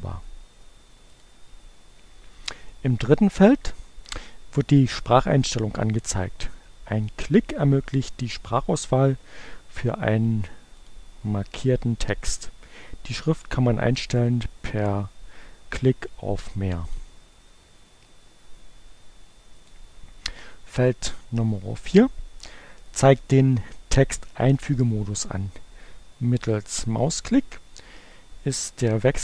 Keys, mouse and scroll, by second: 1.0 click, 8.9-11.1 drag, 16.6 click, 19.0-20.0 drag.